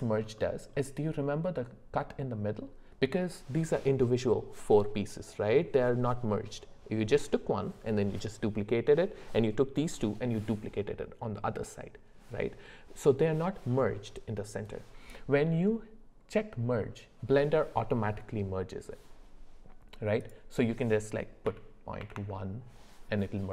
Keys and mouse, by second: 0.4 middle click, 20.3-22.2 drag.